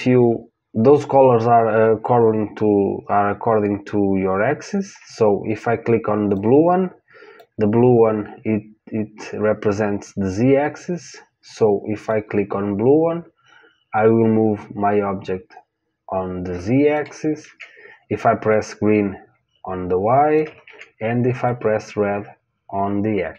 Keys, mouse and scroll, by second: 6.3 click, 12.0 click, 17.4 ctrl+z, 18.4 click, 20.6 ctrl+z, 21.4 click.